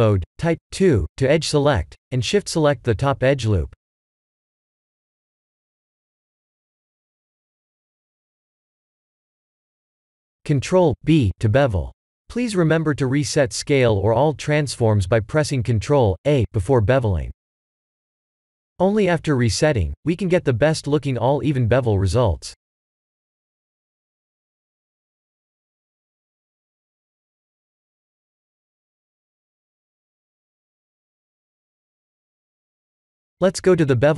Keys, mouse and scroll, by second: 2.1 2, 3.0 alt+click, 4.8 alt+shift+click, 5.7 alt+shift+click, 6.9 alt+shift+click, 7.6 shift+z, 8.0-10.3 middle drag, 10.9 ctrl+b, 14.9 click, 15.6 KP_7, 18.5 ctrl+z, 19.2-20.3 middle drag, 21.2 Tab, 21.2 middle click, 22.1 ctrl+a, 27.5 Tab, 28.2-28.7 middle drag, 29.2 ctrl+b, 31.6 click, 32.1 KP_7.